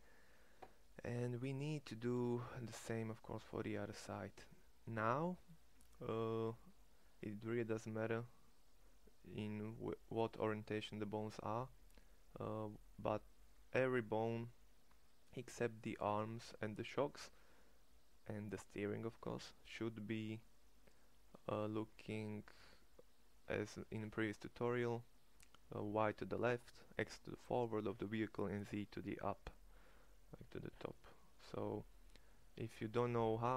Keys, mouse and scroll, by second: 2.2 middle click, 2.9-6.1 middle drag, 6.3 middle click, 7.6-33.5 middle drag.